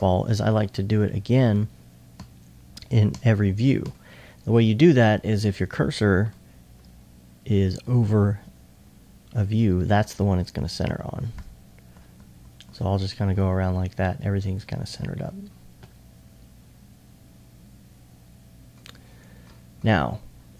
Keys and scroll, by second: 2.2 s, 2.5 s, 3.1 s, 4.5 typing, 9.9 s, 10.9 s, 12.7 typing, 14.6 typing, 16.5 typing.